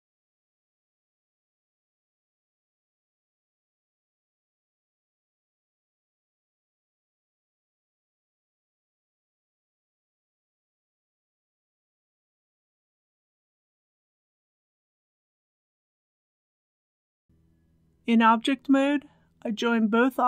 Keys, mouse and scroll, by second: 0.1 ctrl+b, 1.8 shift+click, 3.4-4.6 typing, 4.2 Tab, 5.4 click, 5.6 middle click, 6.8 alt+shift+click, 7.3 ctrl+b, 8.0 click, 9.2 KP_Decimal, 9.3 KP_0, 9.9 click, 10.2 shift+middle click, 10.9-11.9 typing, 12.3 scroll up 1, 12.6 shift+middle click, 13.0 middle click, 13.9 g, 14.0 z, 15.8 scroll down 1, 16.1 middle click, 16.9 Tab, 17.1 click, 17.8-19.4 middle drag, 19.9 click.